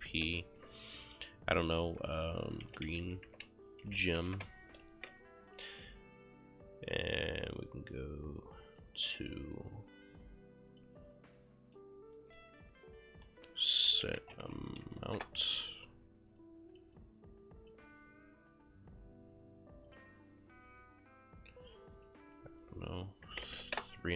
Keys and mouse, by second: 0.0-0.6 typing, 2.5-4.8 typing, 5.0 ctrl+shift+s, 5.6 click, 10.8 click, 11.4 right click, 13.5 right click, 13.6-15.5 typing, 16.5 click, 20.0 click, 22.0 click, 23.1-24.0 typing.